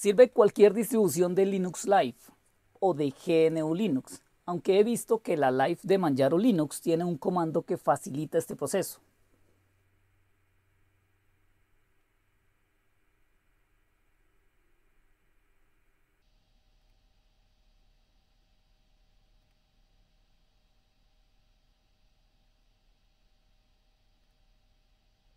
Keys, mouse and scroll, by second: 5.4 click, 6.5 click, 8.5 scroll down 2, 9.8-11.7 scroll down 3, 11.7 scroll up 2, 12.0-15.5 scroll down 4, 16.8-17.8 drag, 19.4 click, 24.2 click, 24.4 click.